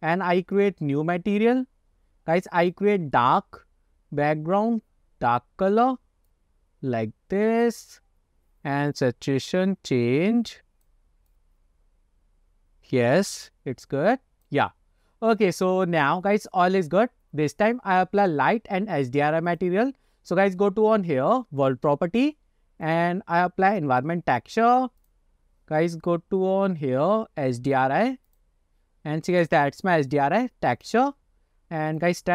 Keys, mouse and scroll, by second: 0.6-2.1 drag, 2.7 click, 19.6 click, 22.0 n, 22.9-24.0 drag, 24.8 click, 25.1 click, 32.0-32.3 drag.